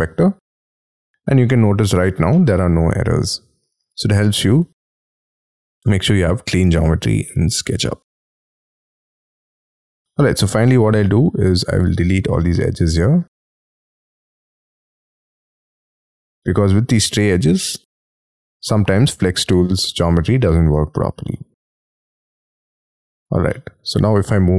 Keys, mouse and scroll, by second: 1.4 middle click, 2.9 shift+middle click, 4.6-4.9 scroll down 3, 8.7 scroll, 8.9 scroll down 1, 9.2 scroll up 5, 10.1 double click, 10.5 double click, 10.8 middle click, 12.0 scroll up 6, 12.6 e, 13.2 middle click, 13.8 scroll up 5, 14.1 shift+middle click, 15.5-16.1 scroll down 11, 16.3-17.1 scroll up 10, 18.0 scroll down 4, 18.8-19.1 scroll up 6, 19.8 middle click, 21.2 middle click, 21.8-22.3 scroll down 12, 22.5 middle click, 23.4 Escape, 23.7 space, 24.1 middle click.